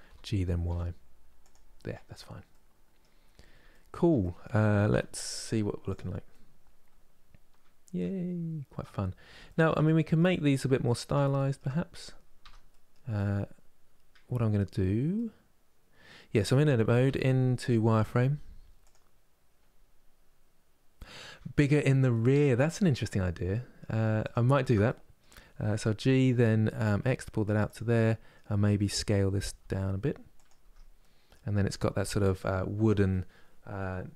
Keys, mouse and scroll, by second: 2.1 middle click, 2.9 scroll down 2, 3.9 middle click, 4.5 z, 5.9-8.7 middle drag, 8.7 scroll up 2, 9.1 shift+middle click, 10.1-11.0 scroll up 2, 11.0 shift+middle click, 11.6 click, 12.1 Tab, 12.3-16.7 middle drag, 16.7 z, 21.3-22.6 middle drag, 22.6 click, 23.2 middle click, 23.9 alt+click, 24.5-25.6 middle drag, 25.6 g, 27.6-29.2 middle drag, 29.2 s, 30.3 Tab, 30.6-33.7 middle drag.